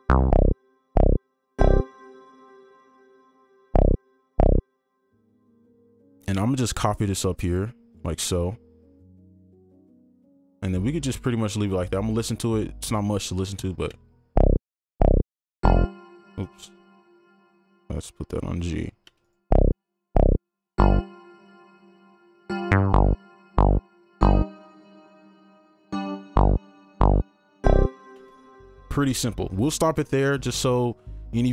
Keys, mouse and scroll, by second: 5.0 space, 5.9 right click, 7.0 shift+click, 8.2-9.0 scroll up 1, 9.0 right click, 10.3 double click, 13.9 space, 15.9 space, 16.4 ctrl+click, 17.1 scroll down 1, 18.0 shift+scroll up 1, 18.2 shift+Up, 18.9 scroll down 1, 19.3 right click, 19.3 space, 20.4-21.6 scroll down 1, 21.6-24.9 scroll up 1, 28.1 space.